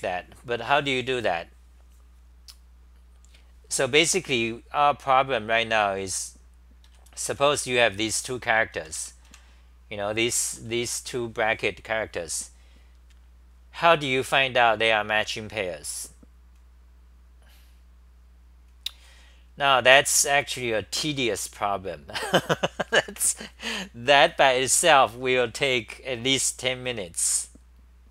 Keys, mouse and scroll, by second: 3.0 Return, 3.0-3.4 scroll up 4, 6.6-7.8 typing, 8.8 super+=, 10.5-11.4 typing.